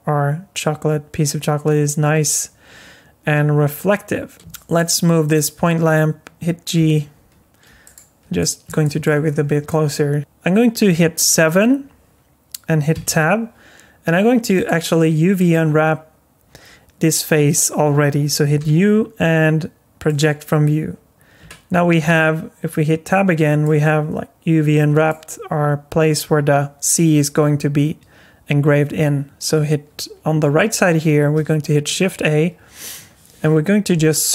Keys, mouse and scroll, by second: 4.4 shift+middle click, 4.4 scroll down 2, 4.5 shift+middle click, 5.3 click, 6.8 g, 8.4 middle click, 8.8 shift+middle click, 9.3 scroll up 4, 9.7 middle click, 10.2 shift+middle click, 10.2 click, 10.2 scroll down 2, 11.2 KP_7, 12.9 Tab, 14.6 click, 15.4 click, 18.6 u, 21.4 Tab, 23.6 alt+middle click, 31.6 shift+a.